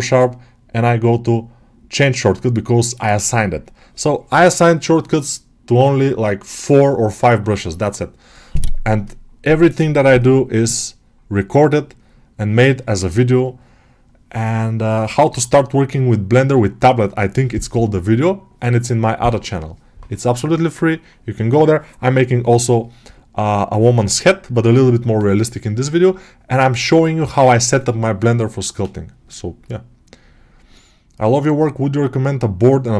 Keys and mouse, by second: 0.5-2.4 right drag, 2.4 click, 2.9 click.